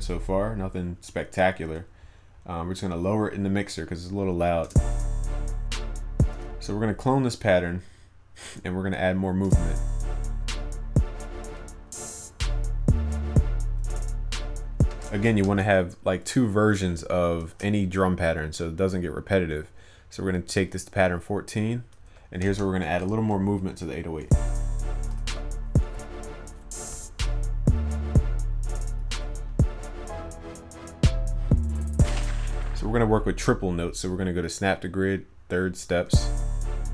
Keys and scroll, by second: 25.2 ctrl+s.